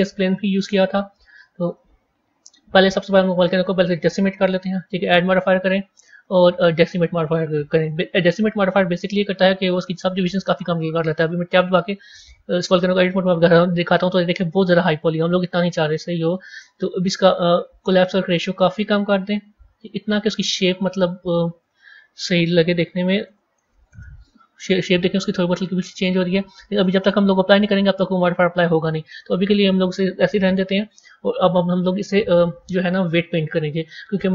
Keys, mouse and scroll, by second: 3.0 click, 4.3-7.3 drag, 7.8-8.9 middle drag, 8.9-9.3 scroll down 3, 9.5 scroll down 1, 9.7-11.0 middle drag, 11.0 click, 11.6 click, 12.8 Tab, 15.4 Tab, 16.9-20.4 drag, 21.5 click, 23.3 KP_0, 25.3-26.4 middle drag, 26.4-27.0 scroll up 1, 27.0-29.1 middle drag, 29.1-29.6 scroll down 2, 30.7 click, 31.6 click.